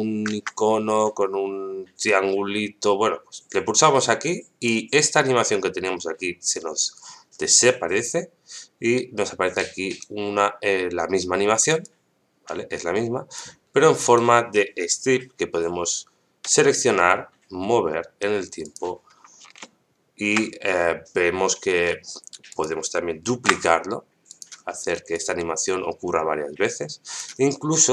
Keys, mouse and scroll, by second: 4.6 click, 9.5 right click, 11.8-13.4 drag, 14.0 right click, 16.4 g, 19.6 shift+middle click, 21.7 g, 23.3 shift+d, 25.1-27.2 drag.